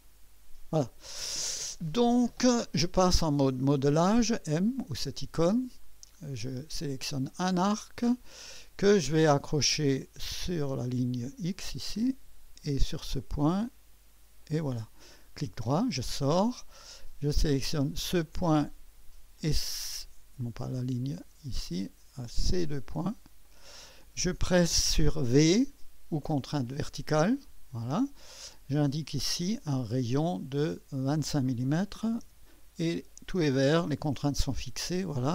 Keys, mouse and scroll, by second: 4.8-5.7 drag, 6.7 click, 10.8 click, 12.7 click, 14.4 click, 18.0 click, 19.4 click, 20.5 click, 21.1 click, 22.5 click, 23.5 click, 27.1 v, 29.1 click, 30.6 click, 31.6-32.5 typing.